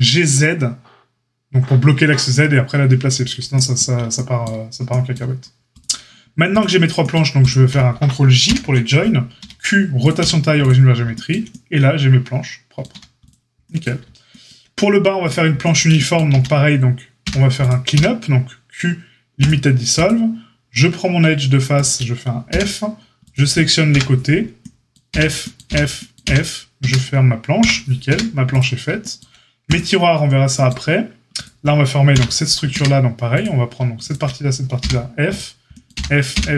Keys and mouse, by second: 6.4 shift+click, 6.5-7.3 shift+middle drag, 7.3 shift+click, 7.6-20.0 ctrl+middle drag, 8.4 ctrl+j, 9.3 q, 10.1 q, 12.9 a, 16.3 Tab, 17.2 a, 17.9 q, 20.0 click, 20.9-23.2 shift+middle drag, 22.4 f, 23.2 click, 23.3-31.3 middle drag, 23.9 KP_Divide, 25.0 f, 25.6 f, 26.2 f, 26.8 Tab, 27.6 KP_Divide, 28.0 a, 31.3 click, 31.4-33.3 middle drag, 32.1 KP_Divide, 32.7 Tab, 33.3-33.7 drag, 33.7 shift+middle click, 34.0 shift+click, 34.0-35.3 shift+middle drag, 34.7 f, 35.3-35.7 drag, 35.7-36.5 middle drag, 35.9 f, 36.3 f.